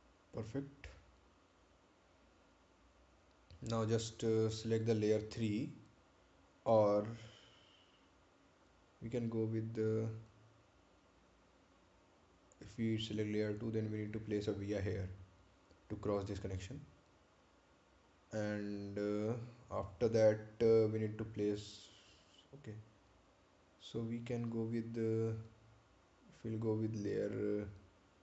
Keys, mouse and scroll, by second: 6.5 click, 10.8 click.